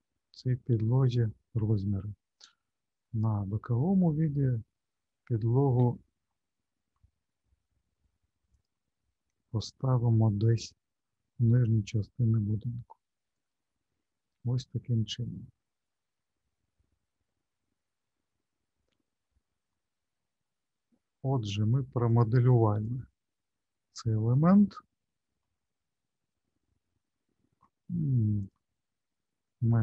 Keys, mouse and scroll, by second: 0.1 scroll up 1, 0.3-2.3 scroll down 5, 3.0 alt+middle click, 5.7 g, 9.0-10.4 scroll up 9, 11.6 scroll up 3, 11.6 g, 14.0-15.1 scroll down 8, 15.9 alt+middle click, 17.5 alt+middle click, 19.1-19.7 scroll down 1, 19.7 middle click, 22.1 click, 25.4 middle click, 28.4 click.